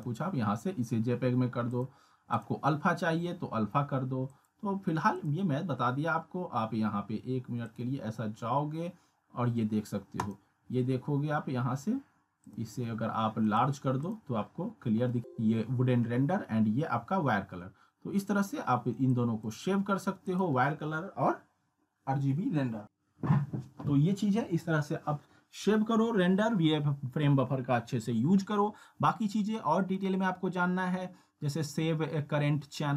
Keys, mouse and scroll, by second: 8.5 click, 12.4 click, 14.3-14.6 scroll down 1, 15.2 click, 19.2-19.8 click, 30.0 click.